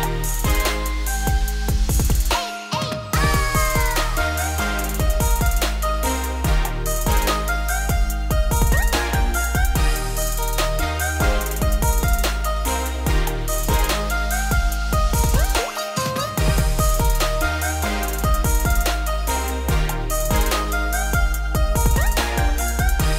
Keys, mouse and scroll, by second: 1.6 Tab, 3.1 click, 3.7 z, 4.8 scroll down 3, 5.0-5.6 middle drag, 5.6 z, 6.1 middle click, 6.3 Tab, 6.8 middle click, 7.7 Tab, 8.2 shift+click, 9.1 ctrl+KP_Subtract, 9.8 ctrl+s, 10.0 middle drag, 10.8 z, 11.1-11.6 scroll up 1, 11.6 click, 12.0 click, 12.2 scroll down 1, 12.4 middle drag, 12.6 z, 13.0-13.3 scroll down 3, 13.3 click, 13.6-15.1 middle drag, 15.1-15.5 scroll up 3, 15.5-17.3 middle drag, 17.3 click, 17.5 scroll down 1, 17.6-19.6 middle drag, 19.6 g, 21.5 `, 22.1 scroll up 3, 22.3 z, 22.7 g.